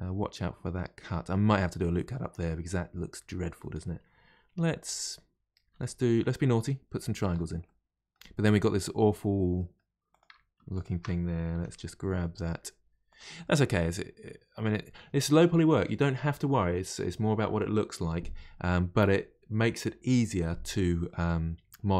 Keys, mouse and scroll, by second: 4.5 1, 4.8 click, 5.6 g, 6.6-10.1 middle drag, 10.1 click, 10.7 shift+click, 11.5 g, 13.4-16.5 middle drag, 21.1-21.9 middle drag.